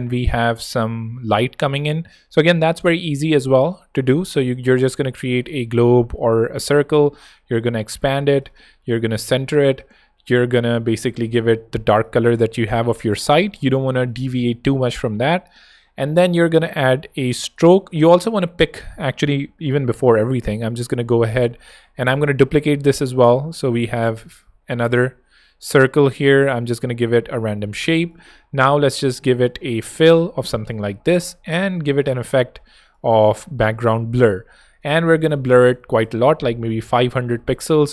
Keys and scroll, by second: 0.7 super+Tab, 2.7 o, 7.9 shift+space, 8.6 alt+shift+space, 8.7 alt+shift+h, 11.2 i, 18.6 super+z, 19.7 ○, 21.2 v, 21.9 super+v, 22.0 super+d, 23.6 shift+space, 28.9 u, 29.3 i, 35.3 5, 35.6 0.